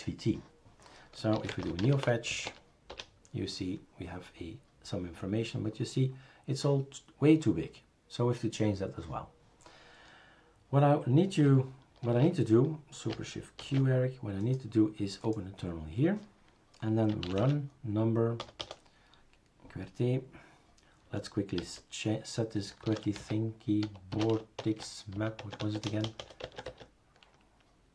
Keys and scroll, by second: 1.1-3.0 typing, 12.1 shift+super+a, 13.6 shift+super+q, 17.4 typing, 18.4 BackSpace, 18.6 BackSpace, 21.6-26.2 typing, 26.4 Tab, 26.7 Tab.